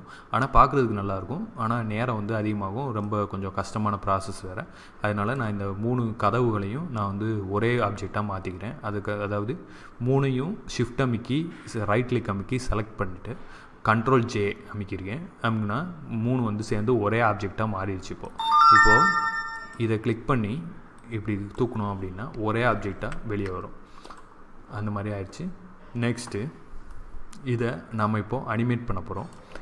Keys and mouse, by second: 2.9-4.3 middle drag, 18.1 right click, 21.2-22.7 drag, 22.9 ctrl+z, 26.7 middle click, 28.7 middle click.